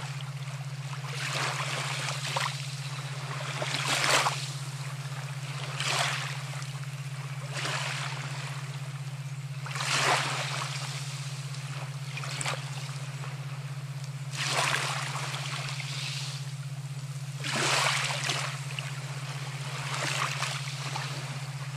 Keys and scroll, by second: 10.7-12.3 typing.